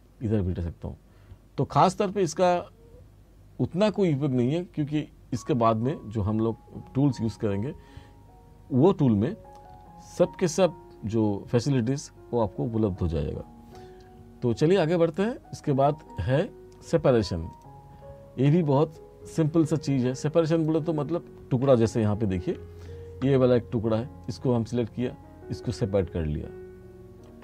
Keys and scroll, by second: 22.5 r.